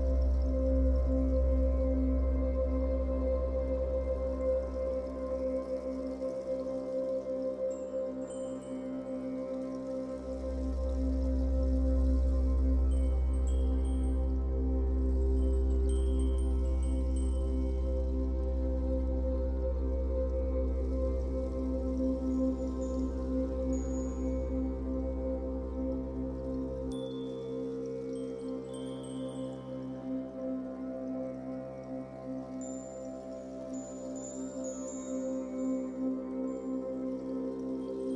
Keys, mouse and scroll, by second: 1.1-1.4 scroll down 2, 1.4-4.7 middle drag, 1.9-2.8 scroll up 4, 3.4 scroll up 2, 4.7 click, 4.9-7.6 shift+middle drag, 5.5 f, 7.6 click, 7.9 f, 8.4-10.5 drag, 10.5-11.7 middle drag, 11.7-14.6 drag, 14.6-16.4 middle drag, 16.4-18.1 drag, 18.1-19.5 middle drag, 19.2 f, 19.5 click, 20.3-22.5 drag, 22.5 middle click, 23.5-25.1 drag, 25.1-28.3 middle drag, 25.8-26.4 scroll down 4, 26.8 scroll down 2, 27.5-28.3 scroll up 2, 28.3 click, 28.4 scroll up 1, 28.7-30.2 shift+middle drag, 29.4 scroll up 2, 29.6 f, 30.2 click, 30.3-32.6 middle drag, 31.4 f, 32.6-38.1 drag.